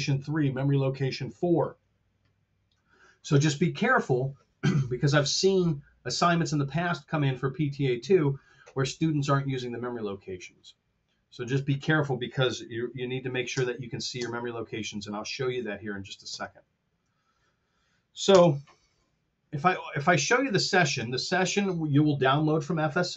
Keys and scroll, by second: 13.4 shift+space, 16.2 shift+space, 18.3 space, 19.7 super+Tab.